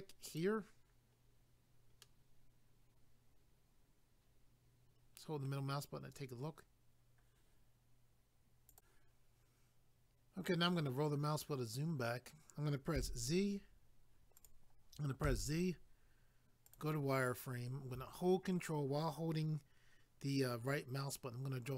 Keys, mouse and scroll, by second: 0.3 click, 0.4 click, 1.2 scroll down 1, 2.0 middle click, 8.7 click, 8.8 click, 10.6 scroll down 1, 14.3 click, 14.4 click, 15.2 z, 16.6 click, 16.7 click, 20.7 ctrl+right click.